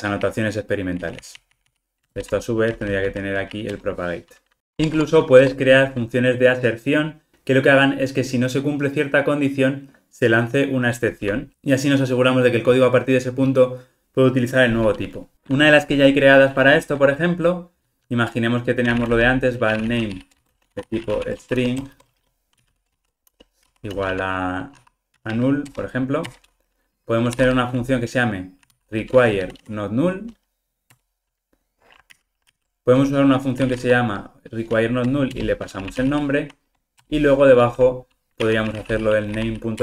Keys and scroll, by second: 2.1 alt+Return, 4.8 Tab, 25.8 Return, 31.0 Return, 32.1 super+z, 37.0 Return.